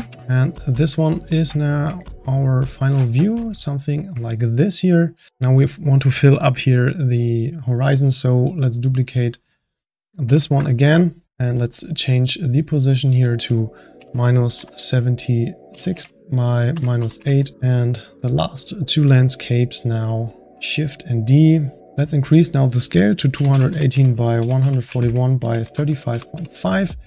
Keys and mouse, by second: 0.2-5.3 middle drag, 2.4 click, 5.3 click, 8.5-9.4 drag, 10.2 shift+d, 12.6-18.2 drag, 18.3 click, 20.1 click, 20.4 shift+d, 22.0-25.0 drag.